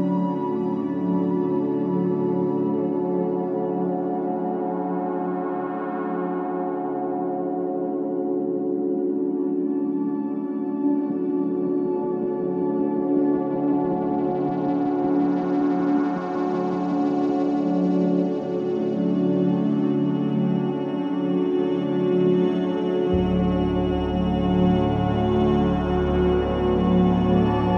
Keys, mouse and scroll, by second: 1.5-2.1 scroll down 1, 5.6 ctrl+alt+shift+e, 5.6 scroll up 1, 6.3 ctrl+shift+a, 9.1 j.